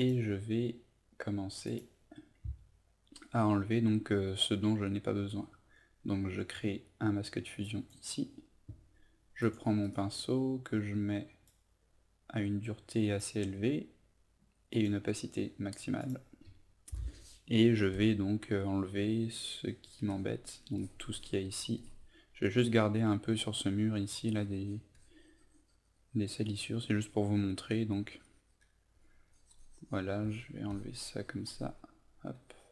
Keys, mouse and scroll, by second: 9.8 right click, 11.4-32.7 drag.